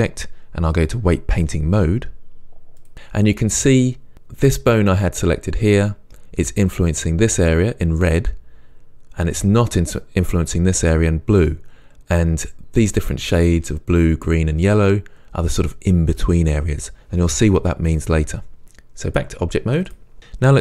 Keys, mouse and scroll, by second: 0.8-20.6 drag.